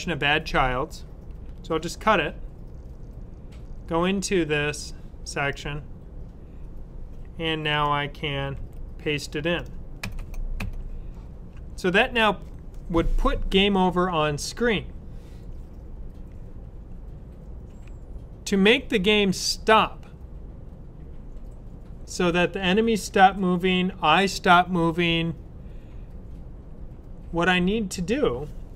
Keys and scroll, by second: 1.8 super+x, 8.4 super+v.